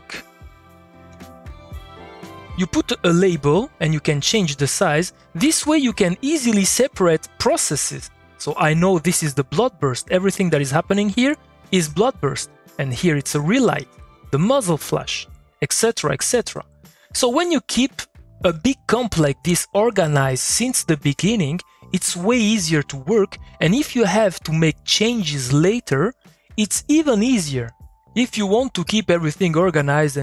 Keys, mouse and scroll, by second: 1.6 click, 4.8 click, 5.4 middle click, 6.4 click, 6.7 middle click, 12.3 middle click, 12.8 click, 13.8 middle click, 16.6 click, 16.8 middle click, 17.2 click, 17.4 middle click, 19.4 click, 19.6 middle click, 20.7 click, 21.5 middle click.